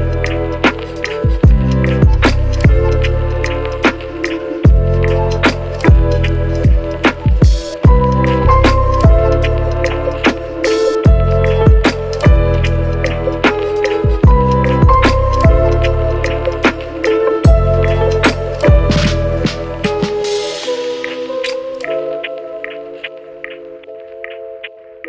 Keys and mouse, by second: 0.1 s, 0.8 shift+z, 0.8 s, 1.1 shift+middle click, 1.7 Tab, 2.1 shift+z, 2.4 Tab, 2.7 KP_1, 3.1 shift+z, 3.3 shift+d, 3.7 shift+middle click, 4.4 shift+z, 4.7 q, 4.9 q, 5.1 q, 5.3 shift+click, 5.5 ctrl+j, 5.7 shift+click, 5.9 ctrl+KP_Subtract, 6.7 shift+click, 6.8 a, 7.0 click, 7.3 h, 7.8 middle click, 8.5-9.5 middle drag, 9.7 shift+KP_Divide, 10.1 ctrl+q, 10.3 Tab, 11.0 ctrl+a, 11.6 ctrl+b, 12.3 Tab, 12.4 click, 12.8 ctrl+z, 14.2 shift+middle click, 14.6 shift+middle click, 15.4 ctrl+z, 16.5 shift+middle click, 16.7 shift+middle click, 17.4 ctrl+b, 18.3 middle click, 18.5 Tab, 18.5 middle click, 18.7 shift+middle click, 18.8 shift+middle click, 19.1 ctrl+q, 19.6 Tab, 19.6-21.6 typing, 19.9 Tab, 20.7 shift+click, 21.5 Tab, 23.0 ctrl+a, 23.2 u, 24.6 Tab, 24.8 middle click.